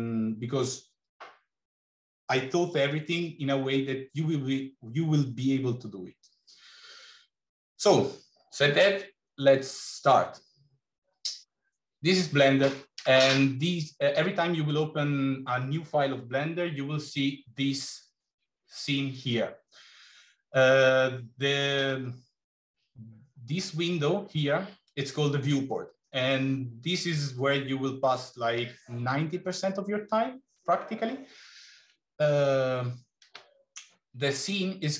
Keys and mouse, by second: 7.6 click.